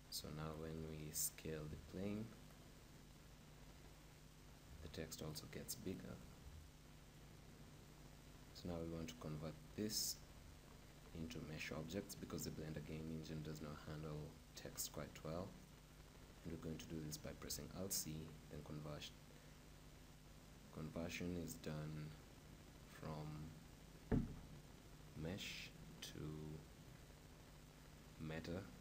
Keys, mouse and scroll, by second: 0.6-2.3 right drag, 1.4 s, 2.7-4.5 right drag, 4.5 s, 4.6 right click, 5.5-8.0 right drag, 6.5 z, 17.0 alt+c.